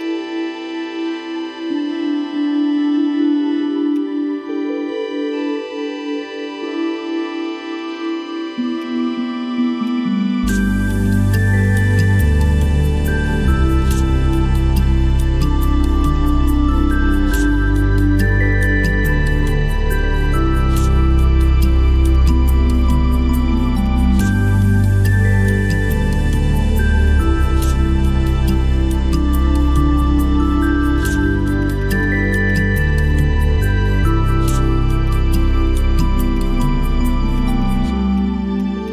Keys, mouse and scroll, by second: 0.0 alt+click, 3.9 alt+click, 10.8 right click, 31.7 double click, 37.4 double click.